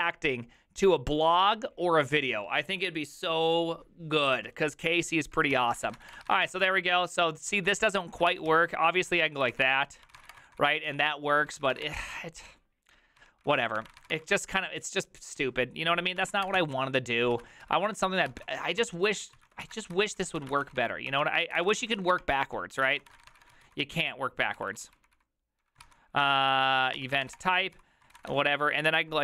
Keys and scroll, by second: 5.7-14.8 typing, 16.0-28.8 typing, 17.3 ctrl+c, 22.4 ctrl+c, 27.0 Tab.